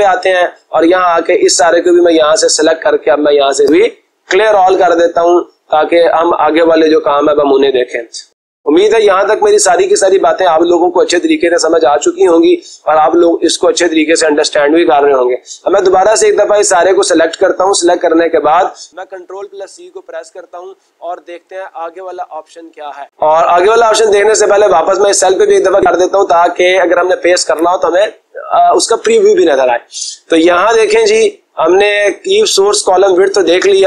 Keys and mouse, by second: 3.4-4.5 drag, 5.1-6.2 drag, 7.3-8.4 drag, 8.7-9.7 drag, 18.3 click, 19.6 ctrl+c, 23.0 click, 23.2 click, 24.7 click, 25.1 click, 27.5 click.